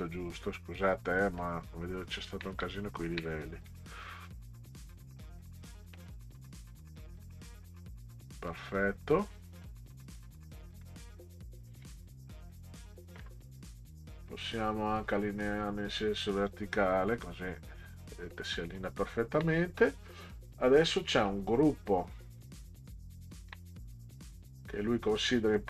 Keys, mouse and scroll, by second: 1.8 ctrl+scroll up 4, 2.7 ctrl+scroll up 4, 3.6-6.6 drag, 8.5 click, 9.1 click, 10.1 click, 10.8 middle drag, 11.0-11.6 scroll down 2, 11.6 scroll down 1, 11.8 click, 15.1 click, 16.2 click, 17.2 click, 18.3 middle click, 19.0 ctrl+scroll down 2, 21.0 click, 21.8-22.2 ctrl+scroll down 4, 23.1 ctrl+scroll down 2, 25.6 drag.